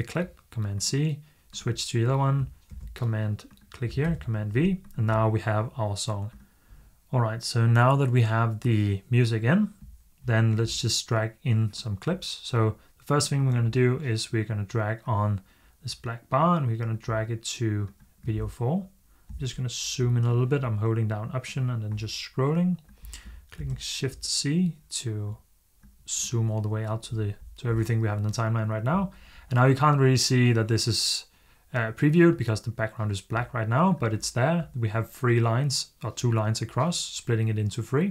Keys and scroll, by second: 2.6 super+v, 23.4 z.